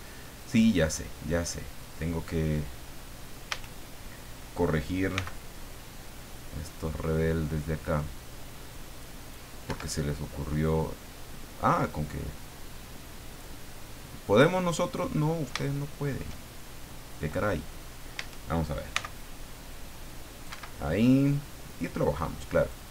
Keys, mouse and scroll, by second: 3.5 a, 5.1 c, 6.1-9.5 drag, 9.7 Escape, 10.6-13.6 drag, 14.5 scroll down 2, 14.9-16.3 middle drag, 18.2 a, 18.9 c, 19.2-20.6 drag, 20.5 Escape, 21.3-22.9 drag.